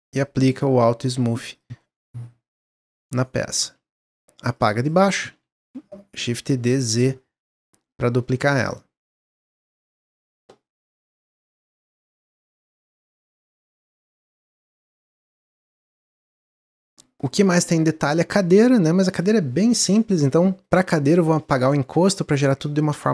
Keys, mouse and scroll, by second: 0.0 click, 1.0 click, 1.5 drag, 1.7-3.3 middle drag, 3.3 click, 4.2 x, 4.8 click, 5.1 shift+d, 7.8 click, 8.1-8.6 middle drag, 8.6 scroll down 1, 8.9-12.0 middle drag, 14.5-15.0 drag, 15.0-17.1 middle drag, 17.1 click, 17.9-18.5 shift+middle drag, 18.5 click, 20.3 middle click, 20.6-21.1 scroll up 1, 21.1 Delete, 21.3 click, 22.0 Tab, 22.4 shift+middle click.